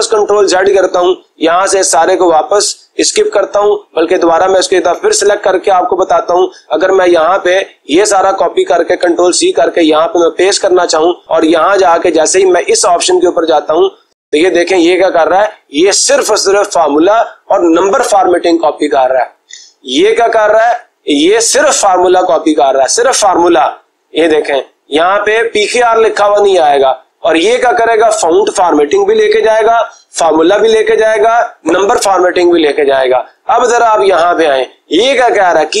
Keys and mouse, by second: 1.3 click, 2.0 click, 2.6 click, 3.1 Escape, 4.2-5.2 drag, 5.6-7.6 drag, 8.1 click, 8.9 ctrl+c, 10.9 click, 12.0-13.1 drag.